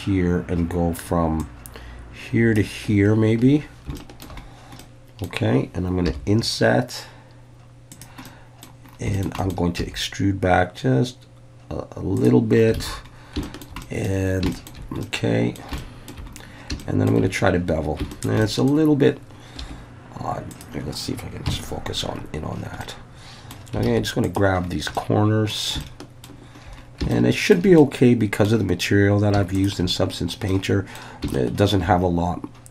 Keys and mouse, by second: 3.4 Escape, 4.0 shift+middle click, 4.8 middle click, 6.1 i, 7.9 click, 8.3 middle click, 9.2 shift+middle click, 9.4 shift+middle click, 9.8 e, 12.2 click, 12.8 alt+a, 13.4 shift+middle click, 13.8 middle click, 14.5 shift+middle click, 15.0 middle click, 15.8 shift+middle click, 16.8 shift+middle click, 18.1 shift+middle click, 18.5 middle click, 19.6 2, 20.5 click, 21.5 KP_Decimal, 22.9 middle click, 23.9 alt+a, 24.3 click, 24.9 middle click, 25.8 shift+middle click, 27.1 shift+middle click, 27.8 middle click, 30.5 middle click, 31.3 shift+middle click.